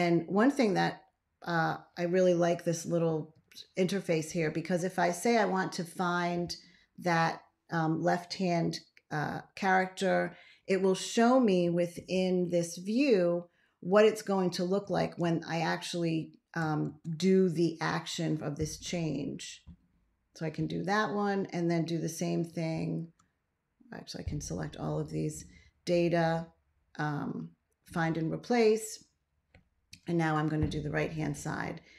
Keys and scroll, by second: 3.2 shift+,, 11.8 ctrl+a, 16.7 ctrl+x, 29.9 shift+..